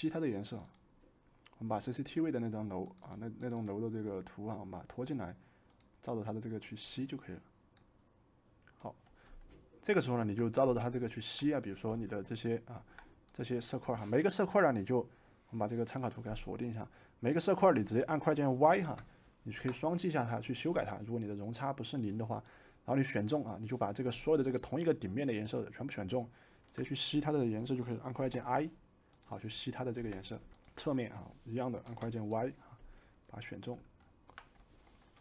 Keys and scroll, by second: 18.8 y, 28.1 i, 30.0 v, 31.8 y.